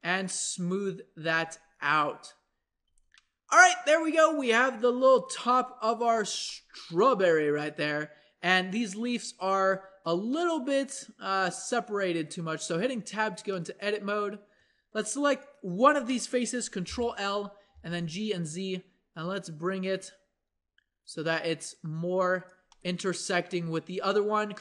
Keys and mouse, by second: 1.3 Tab, 2.6-5.0 middle drag, 2.8 a, 7.9-12.4 middle drag, 12.9 Tab, 16.9 ctrl+l, 17.7 g, 24.0 click, 24.5 ctrl+Tab.